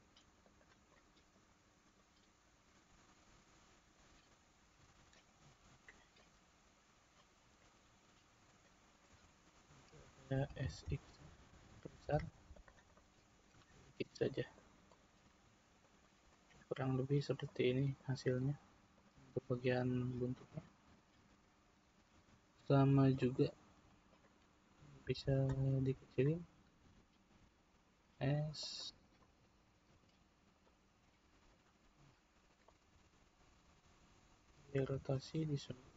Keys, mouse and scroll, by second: 0.9-1.9 middle drag, 1.9 click, 3.2-4.8 middle drag, 4.8 Tab, 5.1-8.4 middle drag, 8.4 click, 9.1 Tab, 10.6 s, 12.9 middle click, 13.5 Tab, 13.9 scroll down 2, 14.2-15.9 middle drag, 15.9 click, 16.3-18.9 middle drag, 18.9 click, 20.0-20.9 scroll up 2, 20.9-22.1 shift+middle drag, 22.1 Tab, 23.2 middle click, 24.1 click, 26.8 s, 29.2 middle click, 29.8 Tab, 30.6 click, 32.6-34.9 middle drag, 34.9 r.